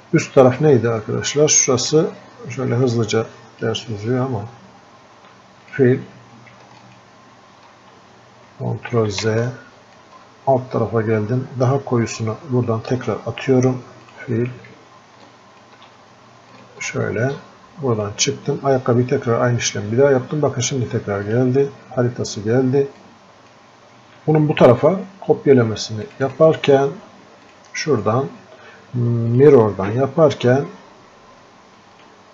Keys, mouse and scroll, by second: 23.4-32.3 drag.